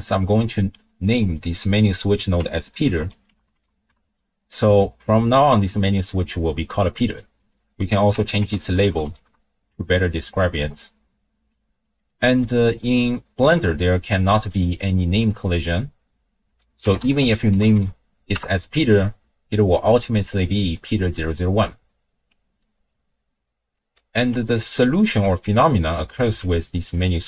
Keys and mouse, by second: 0.4-4.0 drag, 7.4-9.3 drag, 12.0 click, 15.5-18.4 drag, 24.6-25.1 ctrl+drag, 26.2 x, 26.9 click.